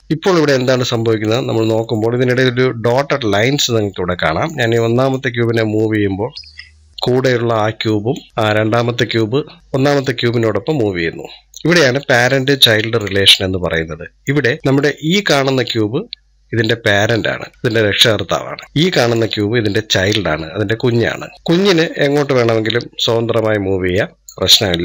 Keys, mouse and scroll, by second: 1.0-1.7 drag, 1.7-3.2 middle drag, 3.2-4.0 drag, 4.0-5.0 middle drag, 5.0 click, 7.3-9.6 middle drag, 10.2-13.2 drag, 13.5-14.2 middle drag, 14.2 scroll up 2, 18.6 middle click, 18.8-20.3 drag, 20.3-20.7 scroll down 2, 20.7-21.5 middle drag, 21.5-24.5 drag, 24.7 click.